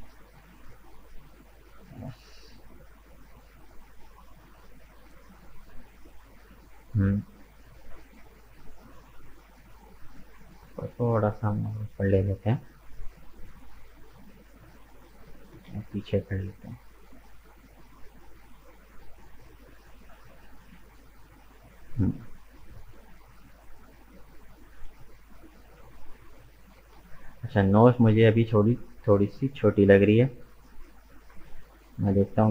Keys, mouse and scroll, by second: 0.7-1.1 scroll down 1, 1.1-7.2 middle drag, 7.2-9.7 scroll up 2, 9.7 right click, 10.5 g, 12.3-13.5 middle drag, 13.5-14.1 scroll down 2, 14.1-15.6 middle drag, 15.6 g, 19.7-21.1 middle drag, 21.1-21.5 scroll down 1, 21.5-22.7 middle drag, 22.7-23.0 scroll down 1, 23.0 middle click, 23.8 Tab, 23.9 right click, 24.3-25.3 middle drag, 25.3 right click, 25.6 Tab, 25.9-26.5 scroll up 2, 26.5-28.3 middle drag, 28.3 click, 28.7-30.0 middle drag, 30.0 right click, 30.7 shift+right click, 31.8 ctrl+KP_Add, 32.1 ctrl+KP_Add.